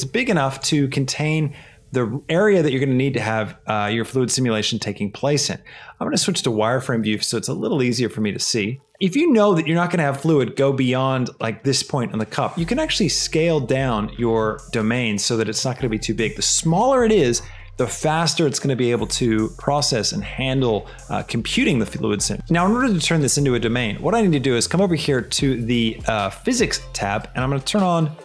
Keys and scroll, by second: 0.7 g, 1.1 z, 8.8 shift+z, 9.0 shift+g, 9.3 x, 13.0 shift+s, 14.1 shift+Escape, 14.5 s.